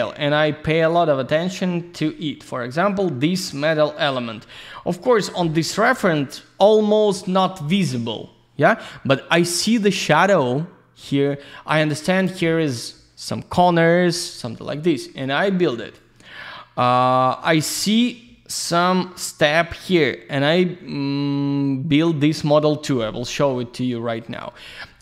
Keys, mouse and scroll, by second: 1.6 ctrl+scroll up 1, 5.0 click, 6.9 ctrl+scroll down 1, 14.2-14.9 scroll down 1, 14.9 ctrl+scroll down 1, 15.4 click, 16.4 click, 24.1 click.